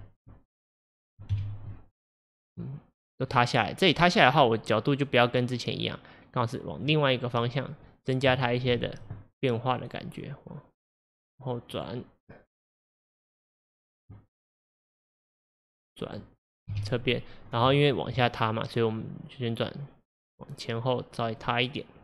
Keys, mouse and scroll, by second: 1.5 KP_1, 2.0-2.6 scroll up 4, 2.6-4.3 middle drag, 4.3-7.2 drag, 7.5 click, 7.5-9.8 middle drag, 8.8-9.9 drag, 11.8 click, 13.0 click, 14.7 click, 15.7 click, 16.8 KP_3, 17.5 scroll up 3, 17.9-19.1 shift+middle drag, 19.1 click, 21.4 drag.